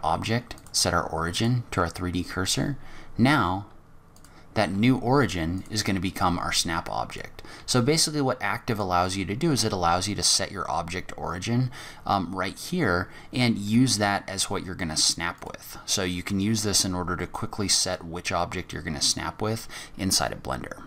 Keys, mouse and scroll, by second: 2.3 g, 4.6 g, 6.1 g, 7.5 g, 13.7 g, 15.9 scroll down 4, 16.3 scroll up 3, 16.6 g, 18.4 scroll down 2, 18.7-19.0 scroll up 2.